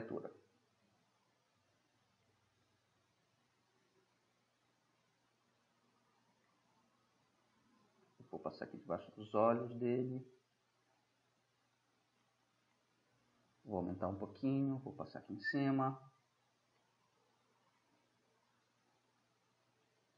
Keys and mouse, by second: 1.8-2.4 drag, 2.4-4.1 middle drag, 4.5-10.2 middle drag, 12.3-13.0 middle drag, 13.8 ], 14.9-16.2 drag, 16.9 click, 17.4-18.7 drag, 19.9-20.1 middle drag.